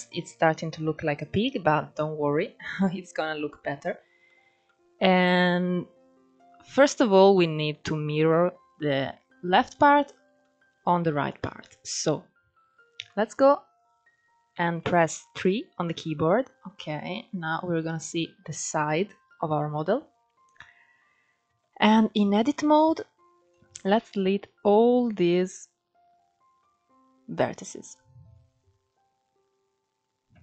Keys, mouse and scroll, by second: 1.3-2.0 scroll up 1, 2.0-2.8 scroll down 1, 2.8-5.2 middle drag, 5.2-5.6 scroll up 2, 5.6-7.0 scroll down 2, 7.0-10.0 middle drag, 10.2 shift+middle drag, 10.5 scroll up 2, 10.9-12.6 shift+middle drag, 12.6 KP_3, 13.9-14.5 scroll up 2, 14.5-15.1 shift+middle drag, 15.1-16.5 scroll down 3, 16.5-18.2 shift+middle drag, 18.2-21.1 scroll up 1, 21.1 Tab, 22.4 alt+z, 23.1 click, 30.0 x.